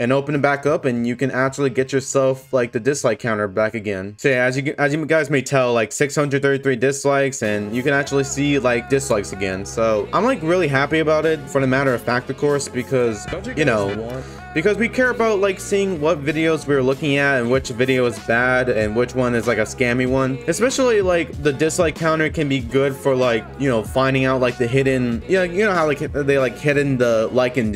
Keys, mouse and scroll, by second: 0.9 click, 4.3 scroll down 2, 4.8 scroll up 2, 8.8 click, 10.7 click, 13.7 click, 17.6 click, 20.4 click, 21.9-22.6 scroll down 1.